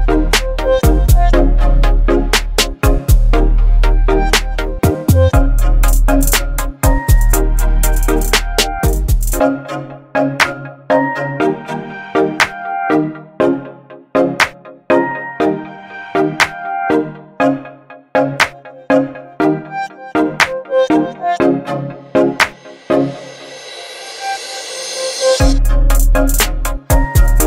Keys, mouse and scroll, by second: 2.4-4.6 drag, 6.1-9.6 click, 11.1 ctrl+t, 13.4-23.4 drag, 23.8 click.